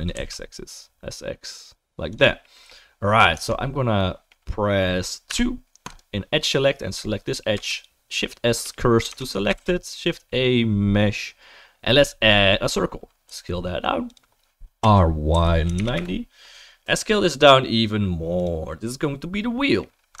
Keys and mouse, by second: 3.3 Tab, 5.3 2, 7.7 shift+s, 8.6-13.3 right drag, 9.1 Tab, 9.5 shift+a, 13.3-20.2 drag, 13.3 s, 14.8 r, 16.8 s.